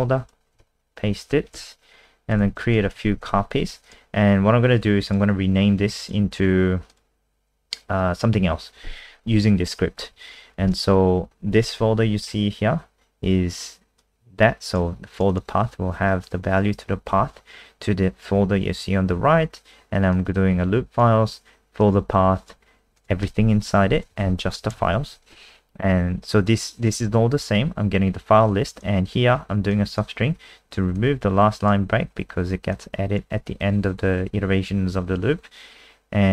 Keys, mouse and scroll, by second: 0.5 ctrl+v, 1.6 ctrl+c, 2.4 ctrl+v, 2.5 ctrl+v, 2.8 ctrl+v, 2.9 ctrl+v, 3.1 ctrl+v, 3.3 ctrl+v, 3.8 click, 10.1 Up, 10.6 Home, 14.0 click, 15.3 click, 20.1 click, 23.6 Left, 24.1 Right, 24.3 Right, 24.6 Right, 26.3 click.